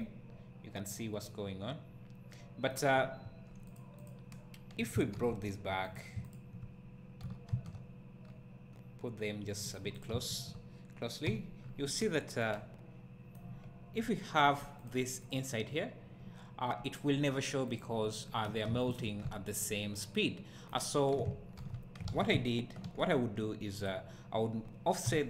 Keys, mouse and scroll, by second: 0.0-4.0 right drag, 4.0 click, 5.1 alt+h, 5.9 click, 7.2 g, 9.7 click, 10.3 shift+click, 11.2 h, 11.6 scroll up 1, 12.4-14.8 right drag, 14.8 click, 17.8 click, 18.9 shift+click, 19.7-23.9 right drag, 20.9-21.2 scroll down 1, 21.6 alt+h, 22.1 alt+a, 22.3 `, 23.9 click, 24.6-25.0 scroll up 1, 25.1 g.